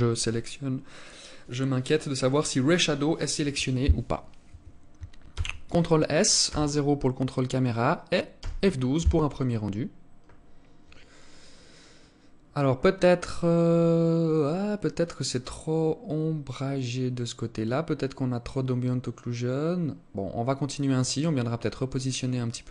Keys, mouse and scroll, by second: 4.8 ctrl+s, 5.9 KP_0.